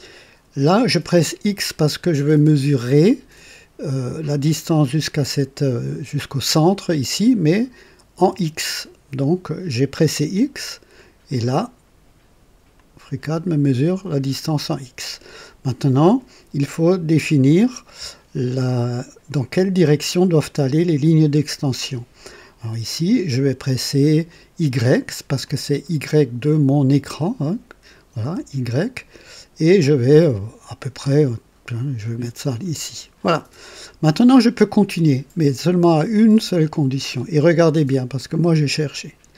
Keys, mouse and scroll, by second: 8.2 x, 12.8 click, 25.5-27.0 drag, 28.2 y, 28.4 y, 32.8 click.